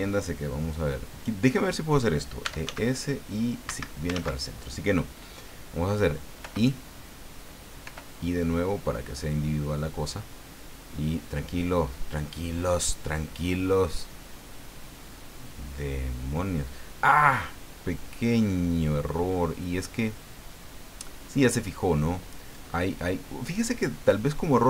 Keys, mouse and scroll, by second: 2.2-3.1 typing, 3.7 Escape, 4.1 ctrl+z, 6.4 i, 7.8 i.